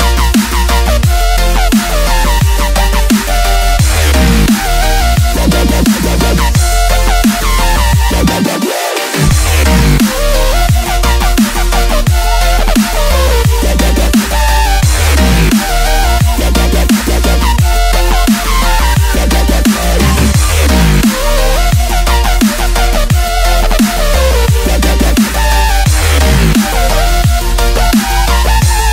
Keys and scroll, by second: 5.9-8.3 typing, 6.7 Tab, 9.3 Left, 10.5 v, 12.0 a, 13.2 i, 15.5 shift+v, 16.9-17.7 typing, 17.9 Tab, 19.8 Tab, 20.2 v, 21.3 Left, 23.9 shift+super+F9, 24.5-27.8 typing, 26.6 super+space, 26.7 super+space, 26.8 super+space, 26.9 super+space, 27.9 super+space, 28.1 super+space, 28.2 super+space, 28.3 super+space.